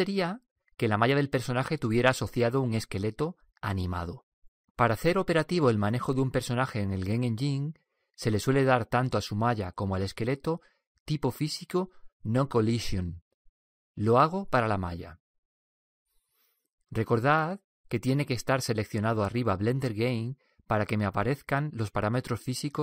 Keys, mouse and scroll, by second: 16.0-20.7 drag.